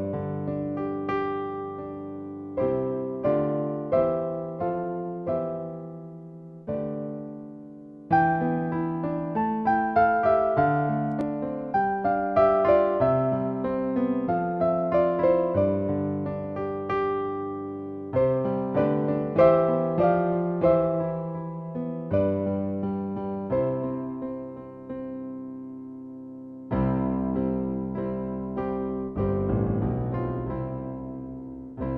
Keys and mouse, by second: 3.1 click, 4.8 click, 9.4 click, 10.4 click, 13.8 click, 18.3 click, 21.4 click, 21.9 click, 22.1 click, 22.3 click, 22.6 click, 23.4 click, 23.9 click, 24.8 super+middle click, 25.3 shift+middle click, 28.4 click, 30.6 click.